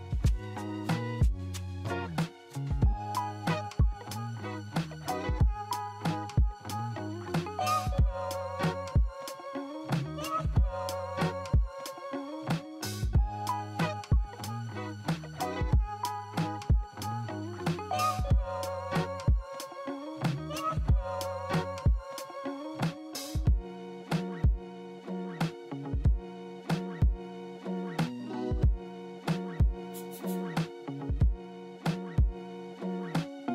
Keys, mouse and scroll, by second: 3.0 middle click, 7.4-8.0 scroll up 1, 8.0 middle click, 8.6 F3, 12.5 t, 13.5 z, 13.9 middle click, 14.0 middle click, 14.3-15.4 scroll down 7, 15.5 middle click, 20.7 right click, 30.9 0, 31.1 Return, 32.5 middle click, 32.9 w.